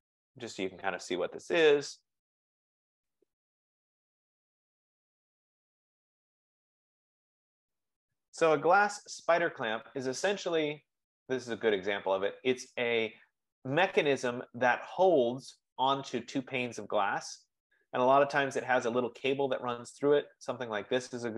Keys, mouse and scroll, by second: 0.0-1.1 typing, 2.5-6.5 typing, 20.5-21.3 drag.